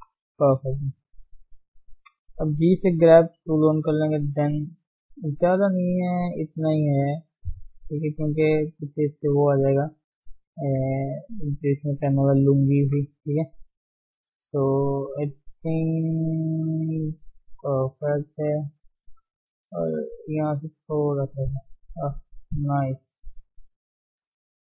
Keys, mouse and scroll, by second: 0.3-0.9 scroll up 2, 0.9-2.0 drag, 2.0 g, 2.2 f, 3.4-5.0 drag, 5.0 shift+z, 5.3-7.4 drag, 7.4 shift+z, 7.5 shift+middle click, 8.0 click, 8.8-9.3 scroll down 2, 9.3-10.5 scroll up 5, 9.7 shift+middle click, 10.5 shift+middle click, 10.7 scroll down 2, 11.0 shift+z, 11.3-11.8 scroll up 1, 11.8-12.8 drag, 12.8 scroll down 2, 13.1 shift+middle click, 13.3-13.6 scroll up 1, 13.6 shift+z, 14.4-15.4 scroll down 8, 15.4-16.8 middle drag, 16.8 scroll up 2, 17.1 middle click, 17.5-18.1 scroll up 1, 18.1 middle click, 19.1-19.7 scroll up 1, 19.7-21.2 drag, 21.2 scroll down 1, 21.3-24.3 middle drag.